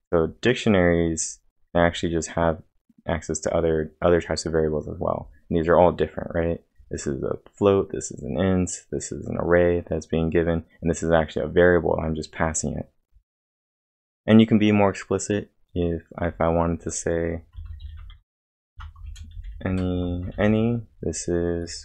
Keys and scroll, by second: 0.0-1.3 typing, 0.2 scroll down 2, 0.8 scroll up 1, 16.2 scroll down 1, 17.4-20.8 typing.